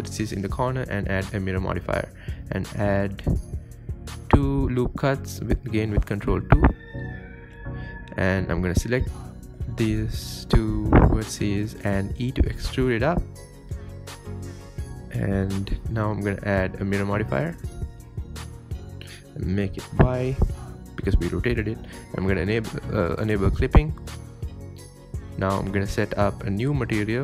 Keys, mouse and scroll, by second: 0.0 ctrl+r, 2.7-3.0 scroll up 3, 3.2 3, 3.4 click, 3.6-4.2 scroll down 4, 4.2 e, 4.8 KP_1, 5.4-6.0 scroll up 9, 5.7 shift+middle click, 6.0 shift+middle click, 6.4 g, 7.5-8.0 scroll down 9, 7.6 middle click, 8.1-11.8 middle drag, 12.4-12.7 drag, 12.9-14.7 middle drag, 14.7 click, 15.1 Tab, 15.2-15.6 middle drag, 15.6 scroll up 5, 15.8 middle click, 16.2-16.6 scroll down 3, 16.6-17.4 middle drag, 17.4 KP_7, 17.7 scroll down 2, 18.7 click, 19.6-21.5 drag, 22.0 scroll down 2, 22.2-22.5 scroll up 2, 22.5-23.7 shift+middle drag, 23.7 click, 24.0-24.9 scroll down 5, 25.3 click, 26.3 click.